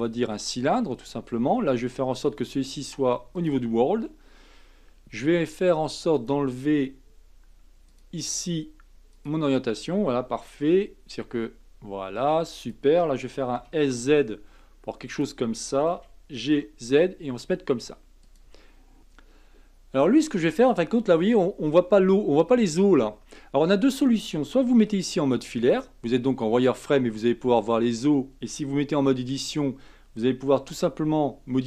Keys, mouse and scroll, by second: 2.2-5.3 drag, 6.1-10.6 drag, 10.6 s, 13.6 s, 15.9 g, 24.9 z, 28.9 Tab, 29.4 click, 30.6 g.